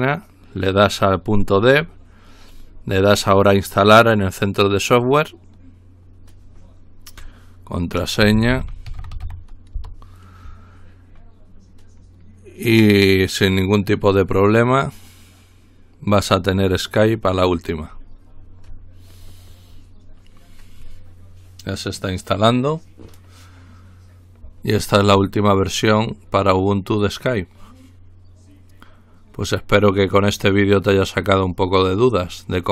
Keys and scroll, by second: 8.0-9.7 typing, 9.7 Return.